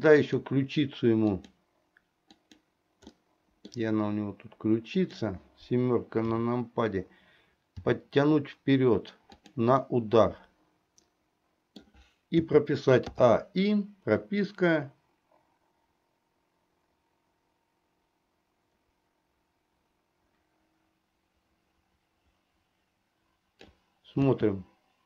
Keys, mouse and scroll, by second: 0.3 click, 1.4 click, 2.6 click, 3.2 middle click, 5.0 click, 6.4 KP_7, 7.9 r, 9.9-11.9 middle drag, 12.5 a, 13.2 i, 14.7-23.8 drag, 24.3 space.